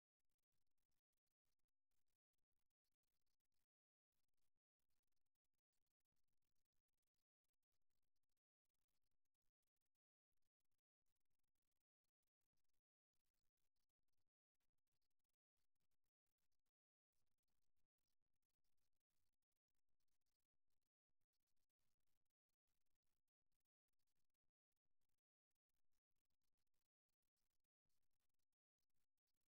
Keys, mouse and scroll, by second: 3.6-5.2 drag, 5.2 right click, 5.7-7.4 drag, 8.3 a, 8.6 a, 13.1 a, 17.5-21.4 middle drag, 25.1 middle click, 25.8-26.9 drag, 28.7-29.5 drag.